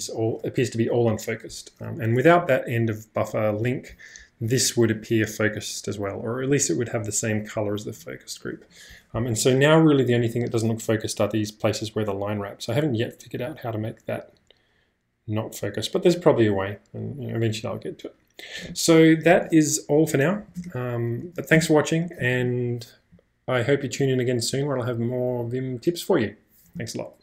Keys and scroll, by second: 20.4 e, 20.6 Return, 21.3 e, 21.6 Return.